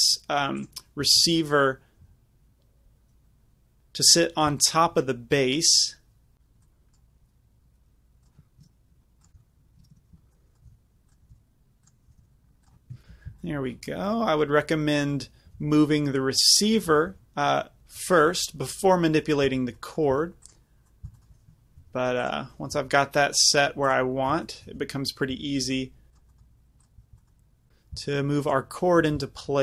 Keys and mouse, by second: 0.2-0.6 middle drag, 0.8 click, 1.1 g, 3.8-5.6 drag, 6.7-9.3 drag, 9.3 ctrl+z, 9.3 r, 10.7 g, 11.3 g, 12.1 g, 12.9 KP_Decimal, 15.6 g, 16.6 click, 17.0 g, 19.6 z, 20.2 z, 20.5-26.2 drag, 21.9 g, 22.8 z, 24.8-28.1 typing, 26.4-27.7 drag, 29.1-29.6 typing.